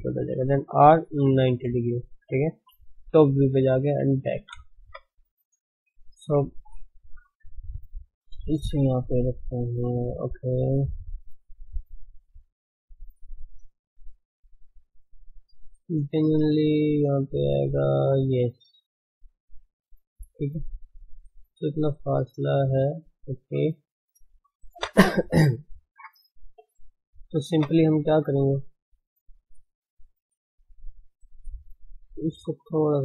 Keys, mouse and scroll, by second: 0.8 r, 2.7 g, 4.8 KP_1, 5.7-7.1 scroll up 1, 7.1 g, 10.4-10.7 scroll up 2, 10.7-12.3 shift+middle drag, 12.3 scroll down 2, 12.6 shift+middle click, 13.6-13.9 scroll up 3, 14.2 shift+z, 15.2 shift+z, 15.7 shift+z, 28.4 scroll down 2, 28.9-29.8 shift+middle drag, 29.8 shift+z, 30.9-32.4 middle drag, 32.3 KP_3.